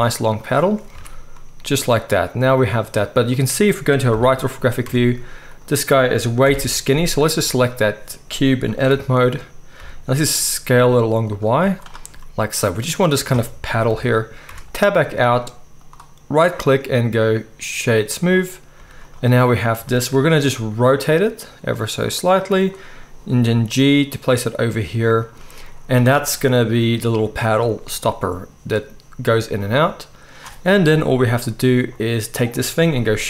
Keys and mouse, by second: 0.9 alt+a, 3.3 click, 3.4-6.3 middle drag, 4.1 KP_3, 4.8 Tab, 6.4 ctrl+l, 7.3 z, 8.6 s, 11.6 z, 13.9 KP_1, 14.5 Tab, 14.5-16.4 middle drag, 14.9 z, 16.4-19.7 right drag, 18.8 z, 19.7-26.3 shift+middle drag, 20.5 r, 23.3 g, 26.3-28.1 right drag, 27.6 z, 28.1-28.6 drag, 28.6-31.3 right drag, 30.9 KP_1, 31.3-33.2 drag, 31.3 z.